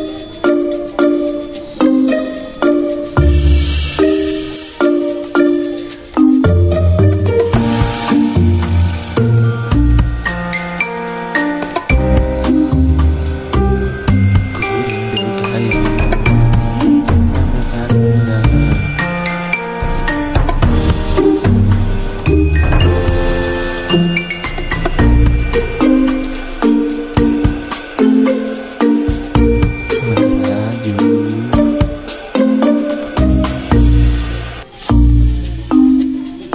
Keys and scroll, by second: 1.9 F6, 8.9 v, 9.5 F9, 10.8 v, 14.4-15.4 typing, 18.1 Escape, 19.2-22.0 typing, 24.3 F10, 24.8 z, 25.5 z, 27.5 v, 27.8 z, 28.7 v, 31.2 r.